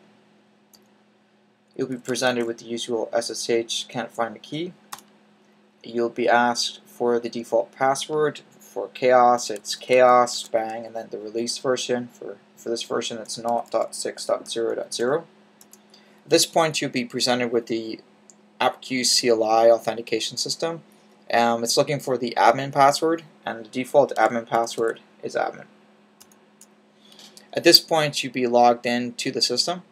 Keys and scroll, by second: 2.0 typing, 9.0-10.2 typing, 12.9-14.9 typing, 23.8-24.7 typing.